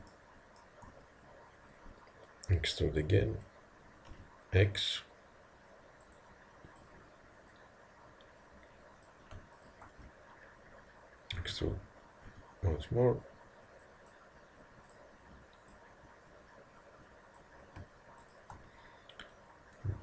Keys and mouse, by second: 0.1-2.9 middle drag, 2.9 e, 6.8-9.3 drag, 11.4 e, 14.9-17.5 drag.